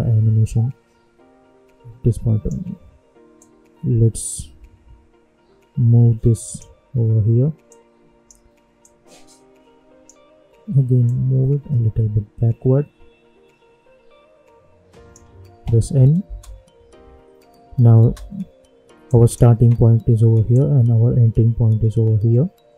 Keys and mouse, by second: 15.7 n, 16.2 space, 19.0-22.7 drag.